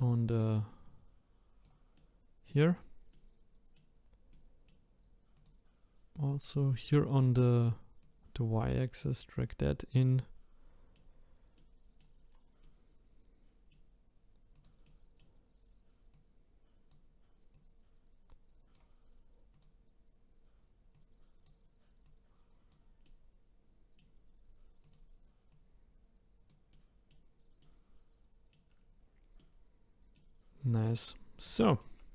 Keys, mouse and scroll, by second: 1.9 middle click, 2.2-5.3 middle drag, 5.3 click, 6.6-8.0 middle drag, 8.0 click, 10.1-12.3 middle drag, 12.3-12.6 scroll down 2, 12.6-14.5 middle drag, 14.5 click, 14.8-16.1 middle drag, 16.1 click, 17.5 click, 19.5 click, 20.9 click, 22.0 click, 23.0-24.8 middle drag, 24.8 click, 25.5 click, 26.7-28.8 middle drag, 28.8-29.4 scroll up 4, 29.4-30.6 middle drag, 30.6-31.0 scroll up 4, 31.0-31.6 scroll down 1, 31.6-32.1 shift+middle drag.